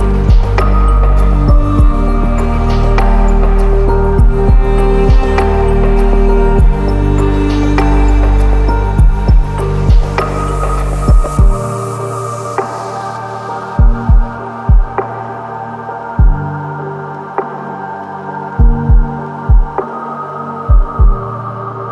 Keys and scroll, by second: 10.1 ctrl+-, 16.3 ctrl+-, 20.0 ctrl+t.